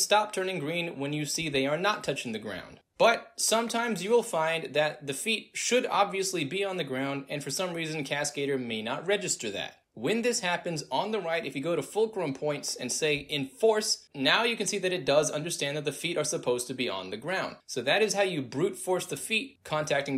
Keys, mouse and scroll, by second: 3.9 alt+right click, 4.2 alt+drag, 4.6 alt+middle click, 5.0-6.5 alt+drag, 6.8 alt+right click, 7.1-7.8 alt+drag, 9.1 click, 9.6 click, 12.0 click, 14.1 click, 15.3 click, 16.8 alt+right drag, 17.1 alt+middle drag.